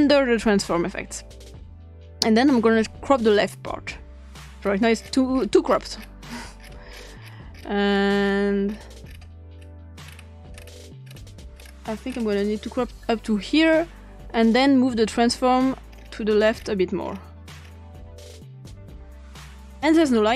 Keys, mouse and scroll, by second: 0.1 click, 3.3 click, 4.6-5.1 scroll down 3, 5.1 scroll up 2, 5.3 scroll down 2, 5.5 scroll up 2, 5.6 scroll down 2, 5.7 scroll up 2, 6.0 scroll down 2, 6.1 scroll up 2, 6.2-7.3 scroll down 5, 7.3 scroll up 2, 7.5-8.3 scroll down 6, 9.0 scroll down 2, 9.2 scroll up 2, 9.5 scroll down 2, 10.0-11.7 scroll up 8, 12.1 scroll up 2, 13.8-15.9 drag, 15.9-16.6 scroll down 2, 17.0-18.8 scroll down 4, 18.8-20.3 scroll down 1.